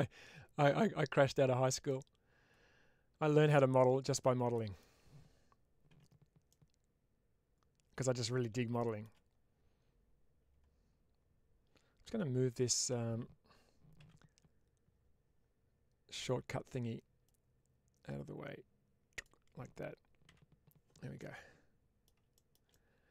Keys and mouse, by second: 1.7-4.6 middle drag, 5.8 1, 6.3-7.8 middle drag, 8.6 shift+middle click, 17.2-19.1 drag, 20.1 n, 21.0 middle click.